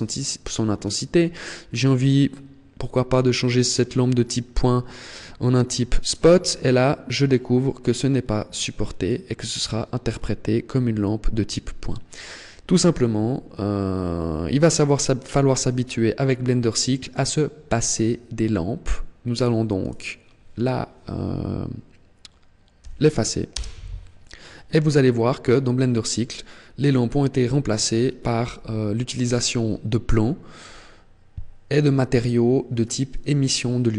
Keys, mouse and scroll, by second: 5.4 click, 7.6 click, 10.9 click, 19.1 right click, 19.6 right click, 22.6 Delete.